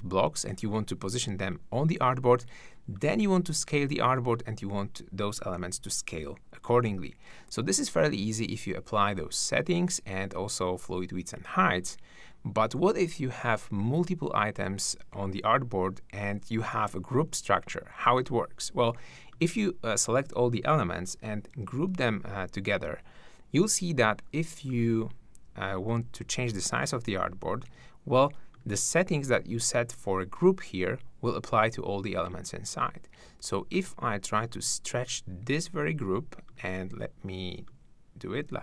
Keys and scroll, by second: 5.6 super+z, 21.5 super+g, 27.6 super+z.